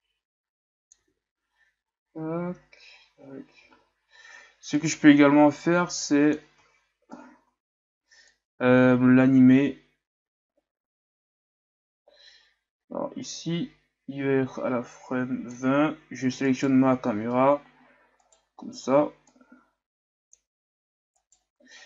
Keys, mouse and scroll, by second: 1.1 alt+a, 3.7 alt+a, 4.8-6.7 drag, 6.7-8.4 shift+scroll down 8, 8.4-11.5 drag, 16.6-17.4 right drag, 18.4 right click, 19.4-21.3 drag, 21.3 right click.